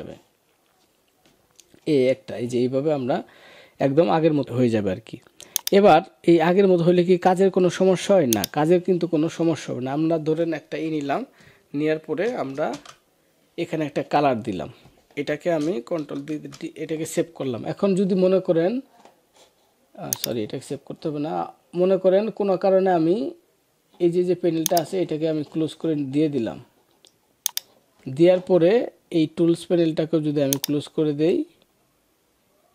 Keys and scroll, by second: 12.6 alt+BackSpace, 15.9 ctrl+d, 16.2 ctrl+s.